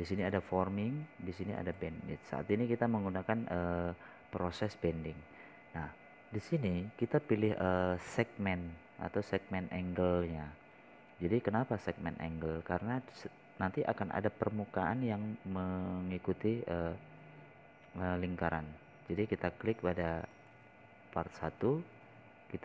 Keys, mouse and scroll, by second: 6.7 scroll up 1, 7.2 scroll down 1.